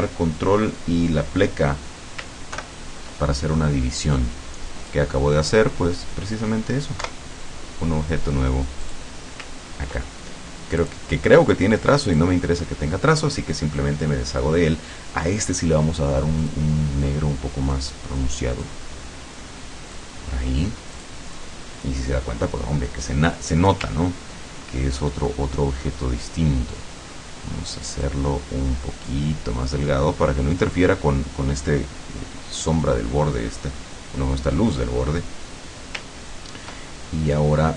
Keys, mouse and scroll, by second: 2.6 ctrl+KP_Divide, 4.9 click, 6.0 click, 7.1 Delete, 8.9 click, 10.8 click, 12.2 click, 16.4 click, 17.8 click, 18.7-20.2 drag, 21.0 click, 21.5 click, 23.5 click, 24.1-24.4 ctrl+scroll up 2, 25.4 click, 28.1-30.8 drag, 33.5-33.8 scroll up 2, 36.1-36.4 ctrl+scroll down 2, 36.8-37.7 ctrl+middle drag.